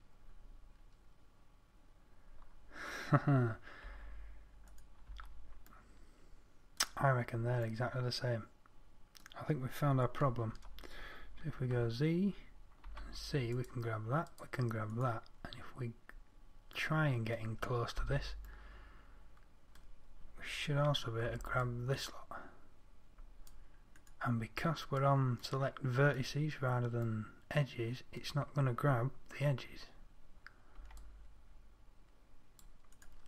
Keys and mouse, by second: 4.2 Tab, 5.5 Tab, 10.9 a, 12.0 z, 13.3 c, 15.5-17.4 drag, 17.5 middle click, 18.5 middle click, 21.7 c, 24.8-26.4 middle drag, 26.9 middle click, 31.2 c.